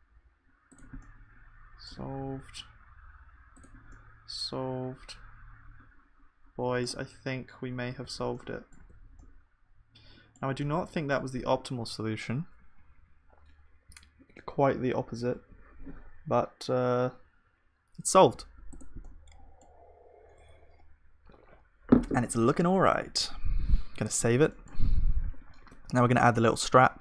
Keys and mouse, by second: 1.0-6.0 middle drag, 2.2 g, 8.0 ctrl+s, 8.3-23.2 middle drag, 8.8 Tab, 23.2 KP_1, 24.1 ctrl+s, 25.6 shift+a.